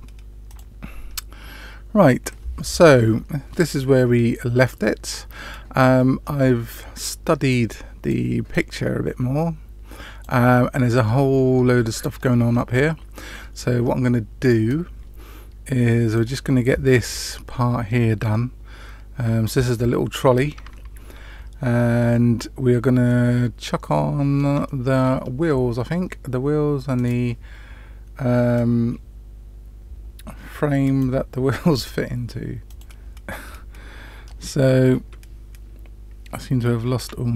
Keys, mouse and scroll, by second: 0.4 click, 23.0-24.4 middle drag, 24.6-25.0 shift+middle drag, 36.9 t.